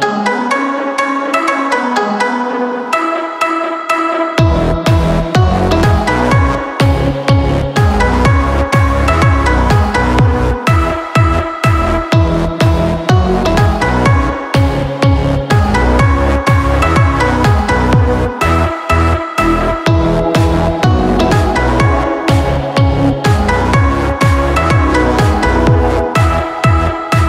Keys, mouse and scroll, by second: 0.0 click, 0.2 click, 0.4 click, 2.6-3.0 scroll down 1, 3.0 middle click, 5.2 click, 6.4 u, 9.5 Tab, 10.4 click, 12.7 click, 14.2 click, 14.7 click, 16.2 typing, 16.3-17.7 scroll down 2, 17.7 click, 18.2 click, 19.3 click, 20.6 click, 22.5 click, 24.0 typing.